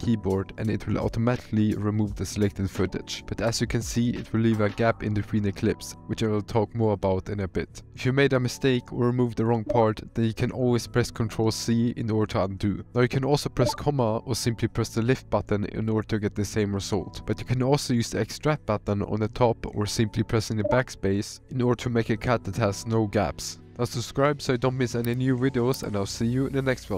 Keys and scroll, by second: 9.6 ctrl+z, 13.8 ,, 20.7 BackSpace.